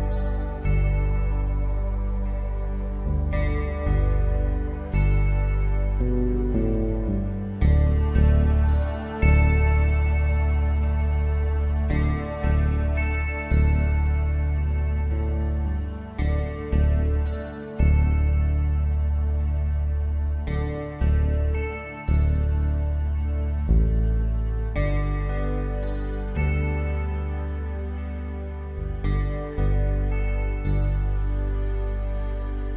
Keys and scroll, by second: 3.7 ctrl+j.